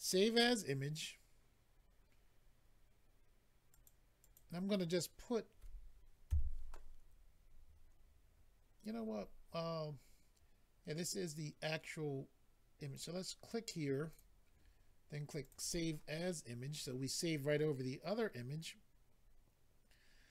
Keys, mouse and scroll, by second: 0.0 click, 3.7 click, 4.2 click, 12.9 click, 13.0 click, 14.1 click, 14.1 click, 15.4 click, 15.5 click, 20.1-20.3 scroll down 2.